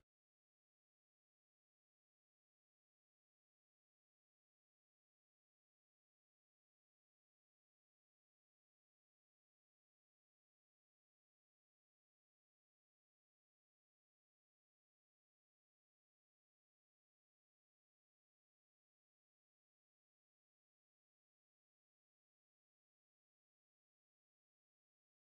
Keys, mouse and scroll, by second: 1.6 s, 3.1 g, 5.0 s, 9.2 middle click, 9.5 middle click, 9.6 middle click, 9.7 middle click, 9.9 middle click, 10.2 middle click, 10.2 KP_3, 11.7 s, 16.7 KP_7, 16.7 KP_4, 18.0 KP_1, 19.5-20.3 scroll up 5, 20.1 Tab, 20.6 shift+middle click, 20.9 shift+middle click, 21.5 ctrl+r, 24.1 Tab, 24.6 shift+z, 25.1 Tab.